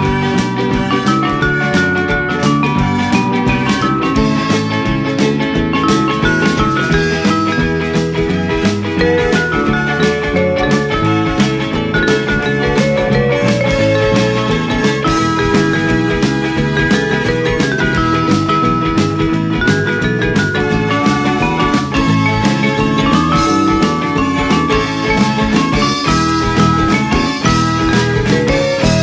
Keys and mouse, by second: 0.4 middle click, 1.9 g, 2.3 y, 3.6 click, 4.0 alt+z, 4.6 click, 5.4 alt+z, 5.9 g, 6.3 y, 7.1 click, 7.5 middle click, 8.8 g, 9.0 x, 10.9 click, 11.1 g, 11.4 y, 12.1 click, 12.7 Tab, 13.9 click, 14.1 right click, 14.6 click, 15.7 click, 17.6 middle click, 19.2 click, 19.5 KP_3, 19.7 Return, 19.7 KP_Enter, 21.9 click, 22.5 middle click, 24.0 middle click, 25.3 F6, 26.1 click, 26.7 shift+d, 27.3 x, 28.3 y.